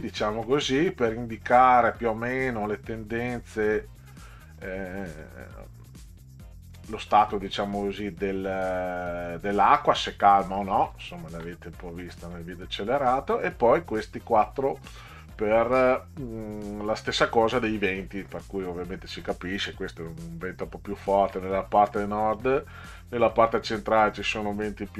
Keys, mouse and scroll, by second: 4.5 click, 9.5 click, 11.0 alt+scroll up 2.